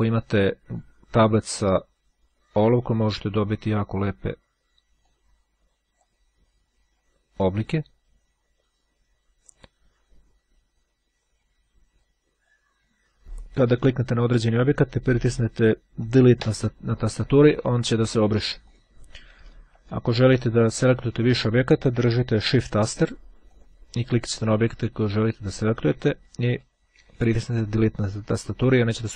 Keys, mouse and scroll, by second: 0.6-2.3 drag, 2.7-4.4 drag, 5.2-6.6 drag, 6.6-7.1 scroll up 1, 7.1-7.9 scroll up 1, 7.9 click, 12.4-13.2 scroll up 1, 14.6 click, 18.8 click, 19.8 Delete, 23.0 shift+click, 23.6 click, 26.3 Delete.